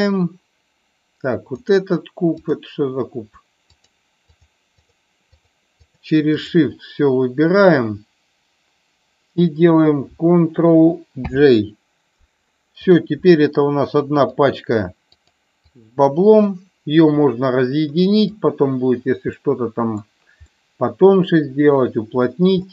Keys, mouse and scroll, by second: 2.4 click, 4.8 shift+click, 5.9 shift+click, 6.4 shift+click, 12.9 click, 15.1 click, 15.8-18.4 drag, 19.4-20.0 middle drag, 20.5-21.4 middle drag.